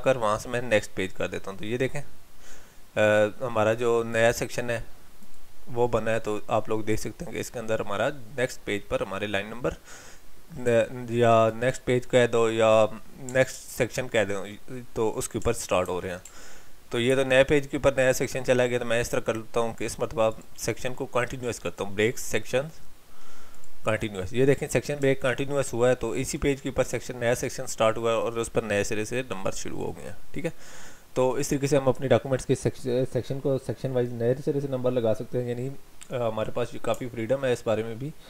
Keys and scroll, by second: 13.6 ctrl+z, 15.8 ctrl+y, 17.1 ctrl+z.